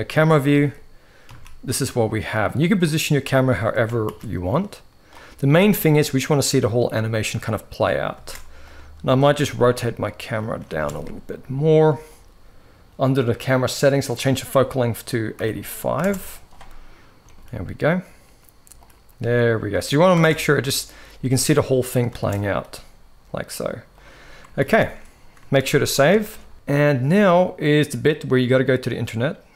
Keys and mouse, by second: 0.3 g, 3.8 ctrl+b, 5.3 space, 7.8 space, 8.4-9.0 drag, 9.0 r, 10.3 g, 13.4-15.8 drag, 16.9 g, 18.8 g, 19.9 space, 21.8 space, 22.3 g, 24.4 ctrl+a, 25.4 ctrl+s, 25.5 ctrl+s, 25.9 shift+middle click, 26.5 ctrl+s.